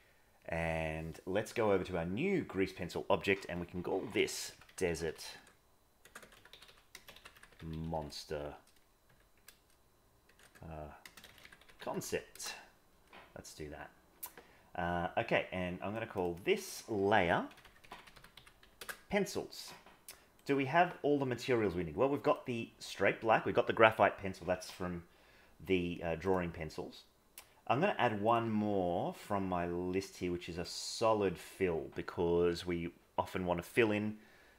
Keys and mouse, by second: 0.4-0.9 drag, 6.2 BackSpace, 10.4 BackSpace, 16.2-18.8 drag, 18.8 \, 26.2 click, 29.1-30.8 drag.